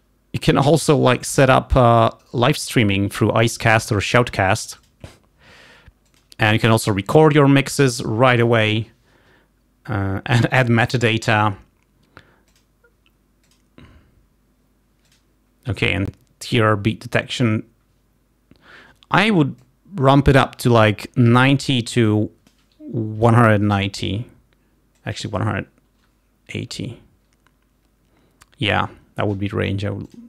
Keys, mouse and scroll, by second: 2.0 click, 6.3 click, 12.7 click, 13.4-15.5 drag, 19.7 click, 21.3 0, 22.2 click, 23.1 1, 23.8 0, 25.0 click, 26.2 Delete, 26.5 8, 30.1 click.